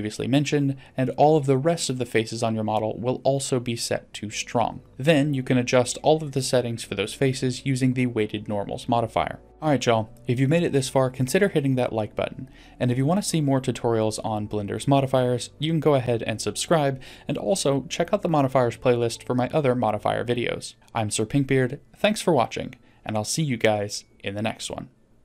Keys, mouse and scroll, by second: 2.5 click, 4.3-4.9 drag.